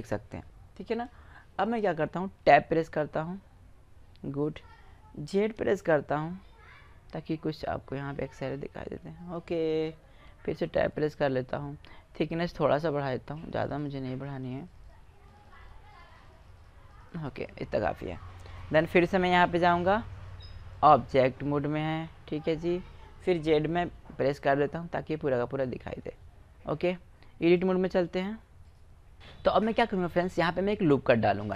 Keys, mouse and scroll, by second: 2.3 Tab, 4.2-5.5 middle drag, 5.5 z, 6.9-8.7 middle drag, 10.0 Tab, 13.3 middle click, 13.6 click, 14.0-19.1 drag, 23.7 z, 24.4-27.7 middle drag, 28.1-29.5 drag.